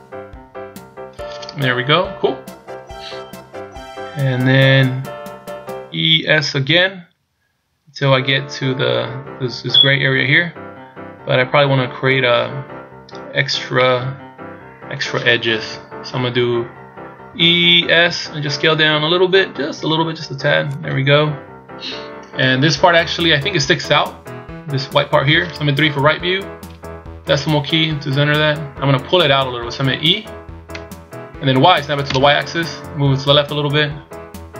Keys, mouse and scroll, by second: 1.9-3.1 scroll up 1, 13.8 middle click, 15.5 KP_1, 17.3 e, 25.8 KP_3, 27.2 KP_Decimal, 28.2-28.9 scroll down 1, 30.6 e.